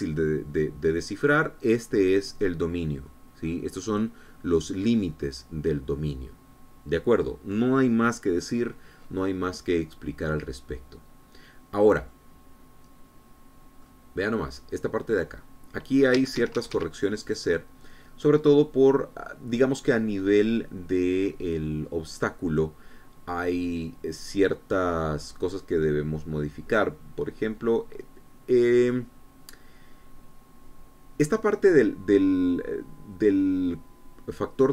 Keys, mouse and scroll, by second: 11.0-12.9 middle drag, 12.9-14.8 middle drag, 16.9 Escape, 18.0 click.